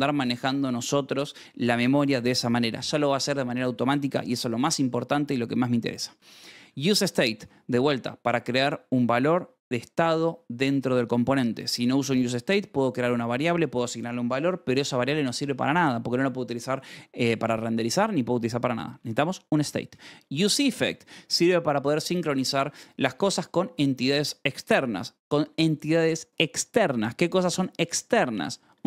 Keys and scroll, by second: 6.8 shift+v, 11.5 v, 12.3 Escape, 18.6-19.5 typing, 19.5 Escape, 21.1 Escape, 24.8 Escape.